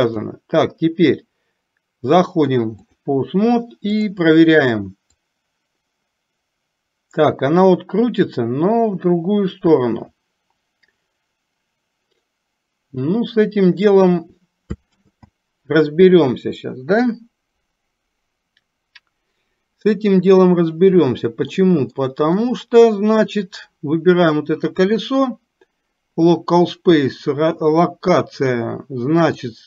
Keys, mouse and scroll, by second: 0.1-3.2 drag, 5.4-14.1 drag, 21.7 middle click, 22.6 middle click, 23.6 click, 29.3-29.6 drag.